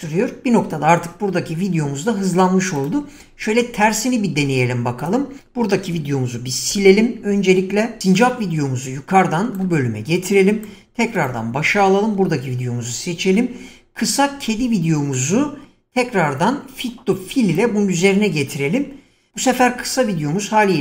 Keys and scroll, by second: 6.6 Delete.